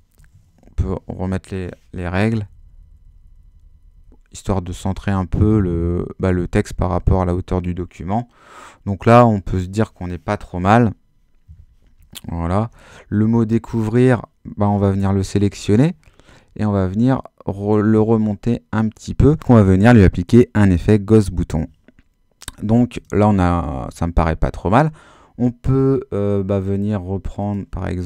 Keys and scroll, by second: 0.6 shift+super+h, 2.3 Down, 4.4 Up, 4.7 Down, 5.4 Up, 5.9 Down, 6.3 Up, 6.6 Down, 9.1 Up, 12.5 super+h.